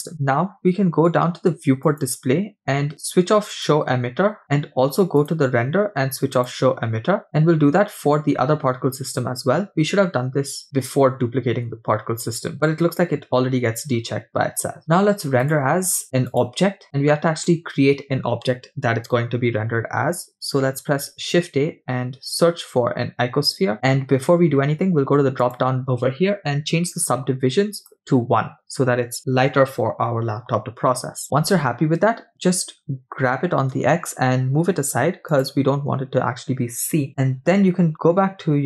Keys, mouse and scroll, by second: 0.1-0.5 scroll up 7, 1.9 click, 2.6-3.1 scroll down 2, 5.3 click, 7.2 click, 7.2-8.0 scroll up 9, 10.7 click, 11.6-14.5 scroll down 9, 15.5-17.8 drag, 20.8 shift+a, 25.7 click, 27.8-29.6 drag, 32.4-32.8 scroll down 2, 33.3 g, 35.8 scroll down 2, 37.1-38.6 scroll up 6.